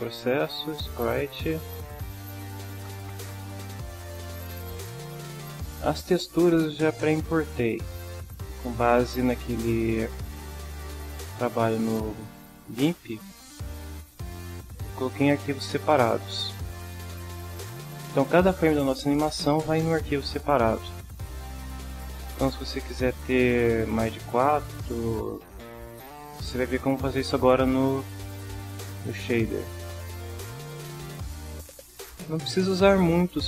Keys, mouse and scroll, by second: 0.8 click, 2.0 click, 9.0 drag, 11.4-12.8 drag, 13.9-14.9 drag, 16.1 drag, 16.9 click, 17.6 click, 21.6 click, 31.0-32.3 drag.